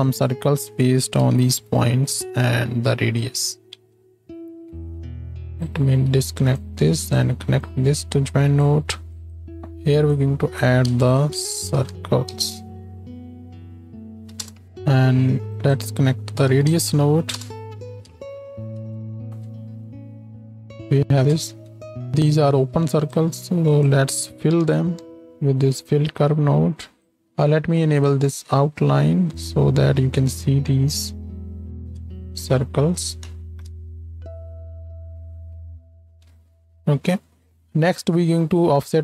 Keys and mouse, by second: 3.4 ctrl+click, 3.8 ctrl+space, 6.6-9.7 middle drag, 9.7 x, 10.1-14.6 middle drag, 15.6-17.6 middle drag, 19.0 shift+Left, 19.2 space, 21.3-22.9 drag, 21.3 space, 21.6 z, 22.9 middle click, 25.8 click, 27.2 n, 30.0 n, 30.6 n, 31.9 ctrl+space, 33.5 shift+Left, 33.7 space, 36.3 space.